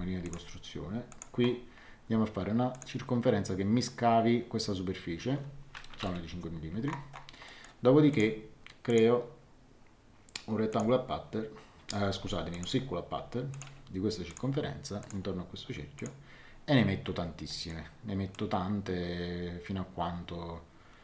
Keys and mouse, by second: 0.2 click, 2.7 click, 5.9 KP_5, 6.0 Return, 7.4 middle click, 8.1 click, 10.7 click, 12.1 Escape, 12.5 click, 17.4 middle click, 18.3 click.